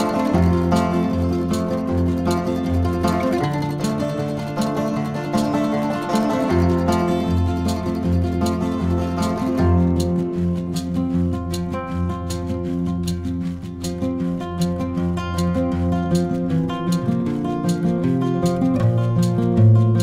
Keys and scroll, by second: 9.3 v.